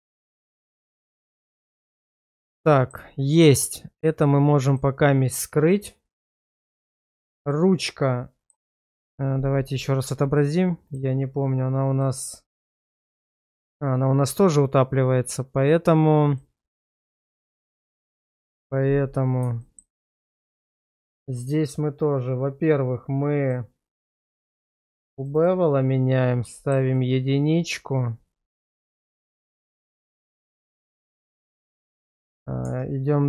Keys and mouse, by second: 0.1 middle click, 1.0 /, 2.0 Tab, 2.7 shift+middle click, 7.5-8.5 middle drag, 12.0 middle click, 12.7-13.0 middle drag, 16.3 click, 19.6 shift+middle drag, 20.0-20.4 middle drag, 20.8 shift+middle drag, 23.4 click, 25.2 click, 25.3 click, 26.6 shift+middle click, 26.9-28.5 middle drag, 28.8 shift+middle drag, 29.8-30.6 middle drag, 30.8 shift+middle click, 32.6 Tab.